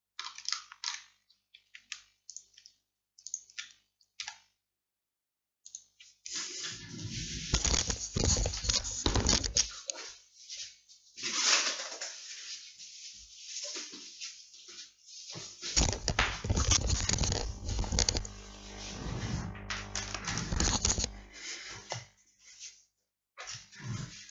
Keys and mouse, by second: 2.4-4.3 middle drag, 4.3 x.